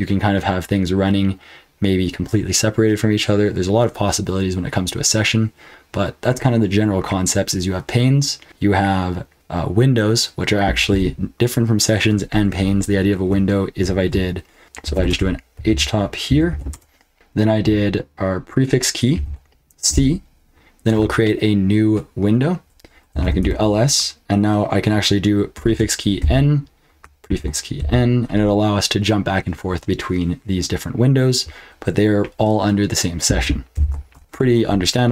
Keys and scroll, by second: 14.6-17.0 typing, 19.1 ctrl+b, 19.8 c, 22.9-23.7 typing, 25.5 ctrl+b, 26.2 n, 27.2 ctrl+b, 27.8 n, 33.7 ctrl+b, 33.9-34.7 typing.